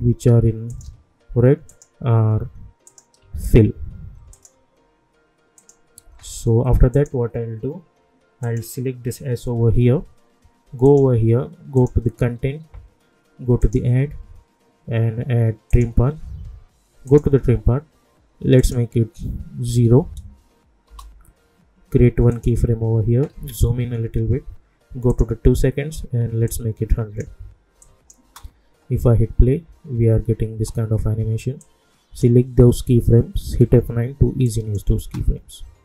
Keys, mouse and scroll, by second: 0.7 shift+click, 4.3 shift+click, 10.8 click, 20.8 Return, 22.3 click, 23.4 =, 23.6 =, 25.1-27.8 drag, 28.2 space, 30.5 space, 31.6-33.4 drag, 33.4 F9, 34.4 click, 35.0 space.